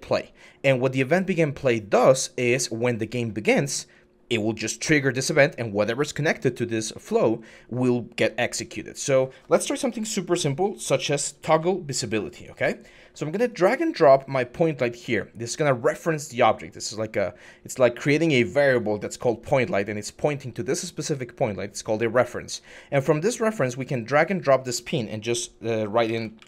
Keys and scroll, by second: 9.6 Tab, 11.2 typing, 25.8-26.4 typing.